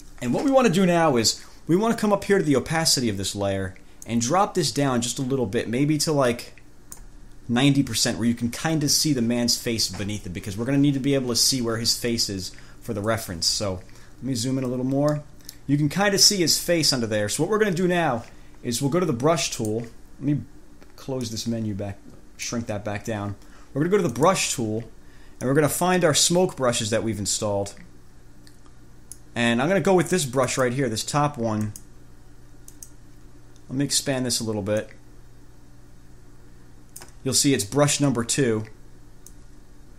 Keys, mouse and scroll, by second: 4.2-7.4 drag, 14.3 ctrl+scroll up 2, 15.4 middle click, 16.2 ctrl+scroll down 2, 21.4 click, 24.4 click, 25.7-29.6 drag, 30.7 click, 31.9 click, 32.9 click, 35.0-37.4 drag, 39.5-39.9 drag.